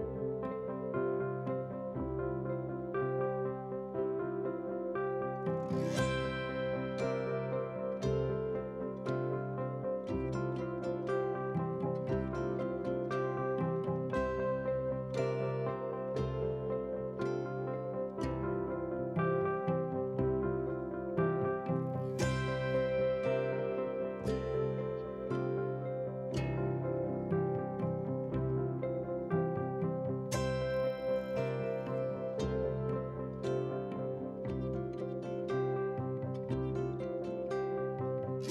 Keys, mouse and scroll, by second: 14.5 ctrl+a, 15.6 ctrl+c, 17.1 click, 18.8 ctrl+v, 19.5 alt+scroll down 1, 20.2 click, 21.1 ctrl+t, 22.5-26.6 drag, 27.7 click, 32.1 click, 33.7 alt+scroll up 1, 34.3-34.8 alt+scroll up 1, 34.8-38.5 drag.